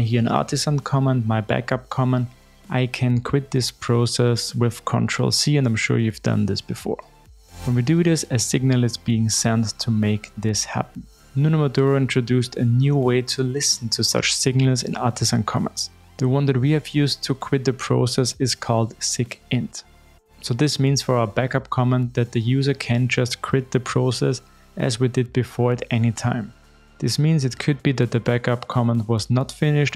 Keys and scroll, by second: 14.0 shift+super+F12, 14.8 super+e.